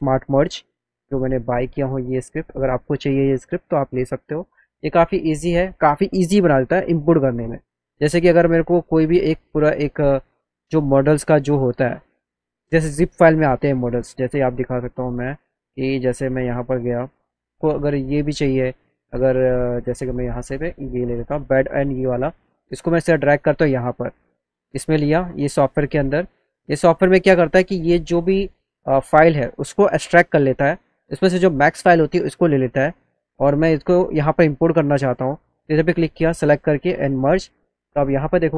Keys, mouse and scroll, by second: 3.2 click, 11.8-13.3 drag, 13.9 click, 14.1 click, 16.1 click, 16.4 click, 20.0 click, 20.8 click, 22.9-24.3 drag, 31.4 click, 37.1 click.